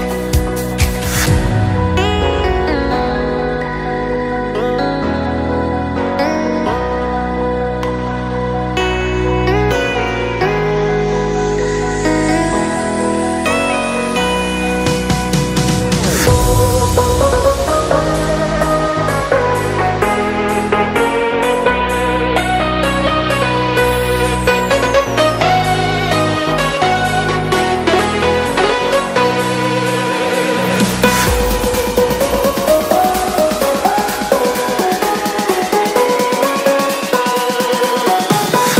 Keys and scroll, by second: 14.7 Return.